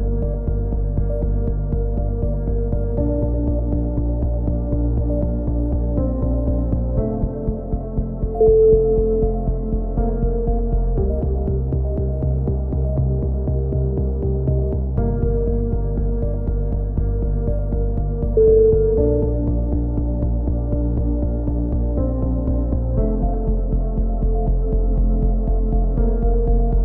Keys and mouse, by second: 0.3-3.2 drag, 3.2 ctrl+l, 3.2-3.9 right drag, 3.9 ctrl+KP_1, 4.5 middle drag, 5.0 e, 5.3 z, 5.6 click, 7.4 c, 9.0-9.7 middle drag, 9.8 c, 10.3 ctrl+KP_1, 10.8 z, 11.0 z, 11.3 click, 14.2 z, 14.4 a, 14.8 Tab, 15.2-15.6 middle drag, 17.1 ctrl+KP_1, 17.1 middle drag, 17.5 click.